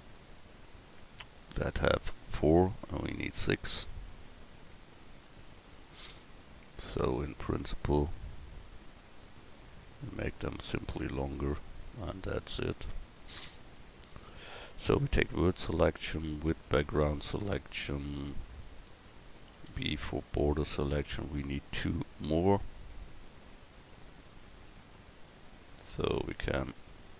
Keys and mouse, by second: 4.3 Tab, 15.0-19.7 drag, 17.4 a, 19.7 b.